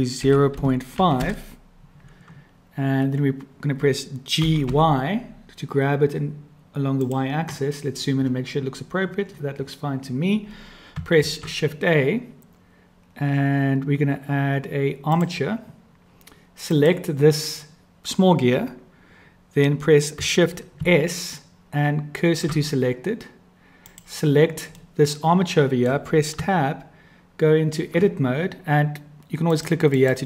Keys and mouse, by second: 1.0-2.2 drag, 4.4 g, 11.2 shift+a, 16.7 click, 20.8 shift+s, 23.9-24.8 drag, 24.8-25.9 middle drag, 26.3 Tab, 29.5 click.